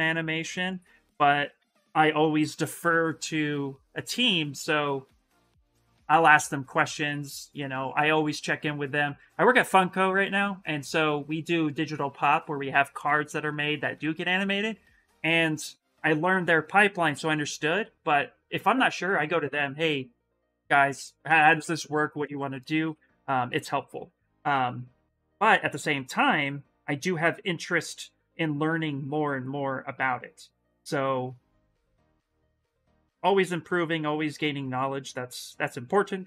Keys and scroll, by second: 24.7 s.